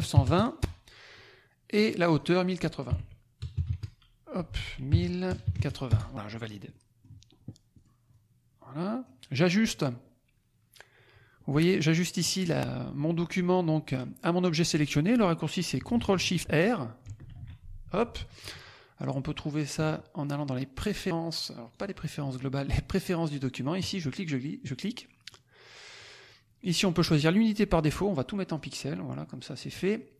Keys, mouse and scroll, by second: 0.0 KP_2, 0.2 KP_0, 0.5 Return, 1.7-2.8 drag, 2.8 KP_1, 3.3 KP_0, 3.5 KP_8, 3.6 KP_0, 4.5 ctrl+a, 4.8 ctrl+KP_1, 5.2 ctrl+0, 5.8 ctrl+Return, 6.7 click, 6.9 middle click, 7.7 click, 8.0-9.2 drag, 11.4 click, 13.4 click, 17.0 ctrl+shift+r, 18.9 click, 21.7 click, 23.7 click, 25.2 click, 26.5-28.0 drag, 28.5-29.7 drag.